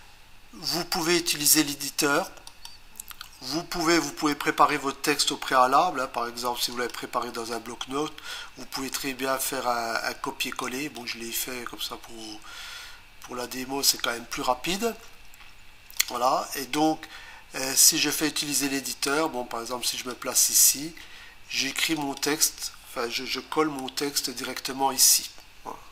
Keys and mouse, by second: 2.5 click, 6.7 click, 8.9 right click, 10.6 click, 16.0 click, 19.9 click, 22.0 click.